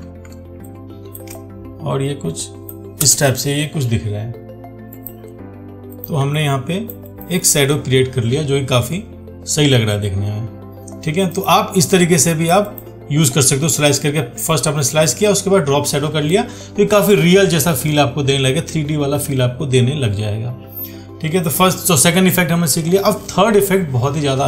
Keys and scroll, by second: 0.0 ctrl+t.